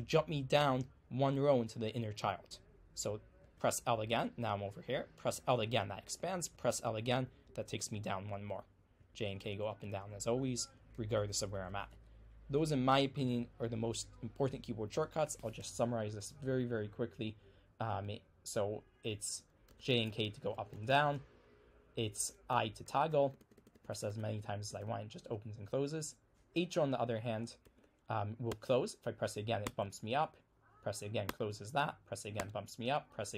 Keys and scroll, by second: 3.5 l, 8.8-12.5 typing, 19.5-25.2 typing, 26.5-28.5 typing.